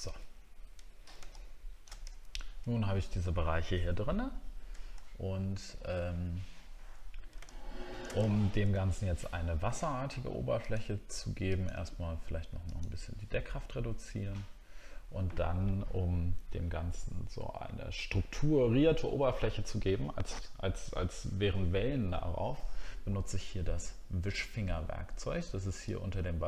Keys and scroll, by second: 2.1 alt+scroll down 1, 4.9 alt+scroll up 1, 6.2-7.9 alt+scroll down 2, 8.3-9.3 alt+scroll down 4.